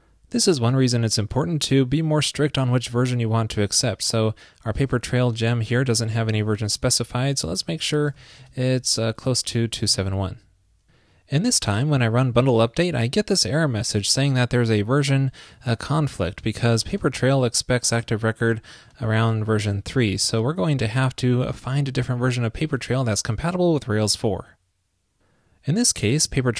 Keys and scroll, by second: 8.7 super+v.